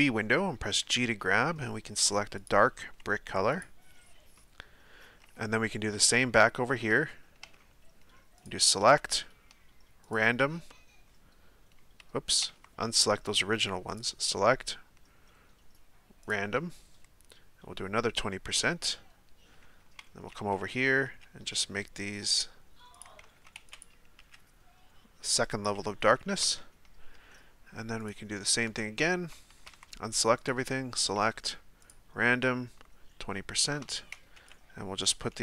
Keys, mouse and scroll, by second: 0.8 g, 2.8 s, 4.4-7.0 middle drag, 7.0 Tab, 7.4 Tab, 10.2-12.3 drag, 12.3 a, 12.5 a, 16.3-19.6 drag, 19.6 a, 19.8 a, 20.4 a, 21.2 g, 23.2 a, 23.3 a, 23.8 b, 24.2 g, 26.4 Tab, 28.7 Tab, 29.6 a, 29.7 a, 31.9-33.8 drag, 33.8 a, 34.0 a, 35.1 b.